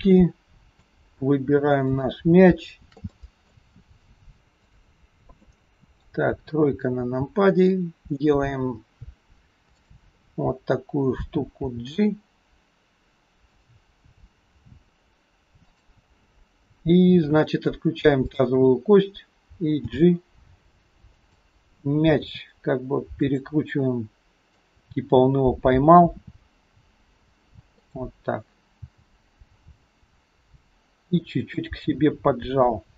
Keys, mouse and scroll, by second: 0.3 middle click, 2.0 shift+click, 3.1 middle click, 4.6 shift+click, 5.5 middle click, 6.5 KP_3, 6.8-7.9 scroll down 3, 7.9-8.5 scroll down 2, 9.7 shift+click, 11.7 g, 14.5 r, 18.2 shift+click, 19.9 g, 22.2 r, 23.9 middle click, 26.1 r, 28.9 g.